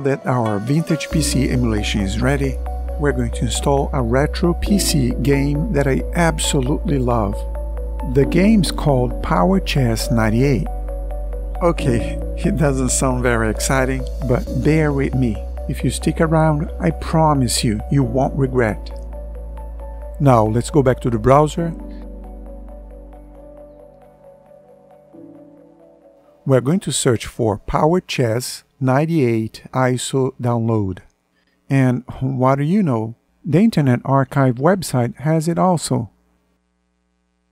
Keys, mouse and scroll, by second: 30.2 Return.